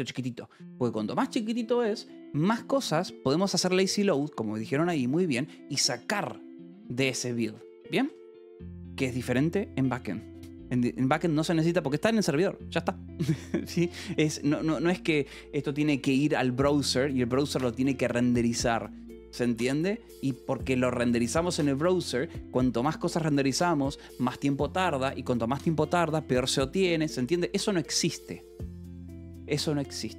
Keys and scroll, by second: 8.0 w.